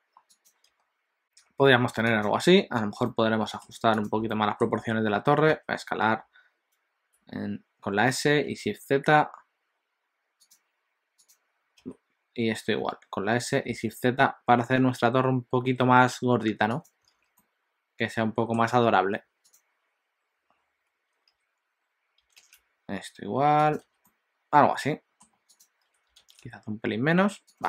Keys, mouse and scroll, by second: 0.8 s, 3.1 middle click, 4.3 click, 4.5 shift+middle click, 5.7 s, 11.4 click, 11.8 s, 17.2 alt+a, 17.4 middle click, 19.4 click, 21.3 s, 23.8 alt+a, 24.0 middle click, 25.5 click, 25.8 s.